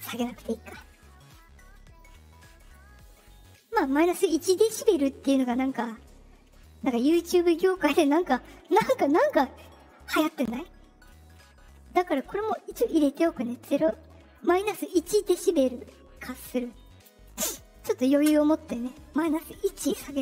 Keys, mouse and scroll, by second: 0.6 click, 12.9 click, 17.4 click.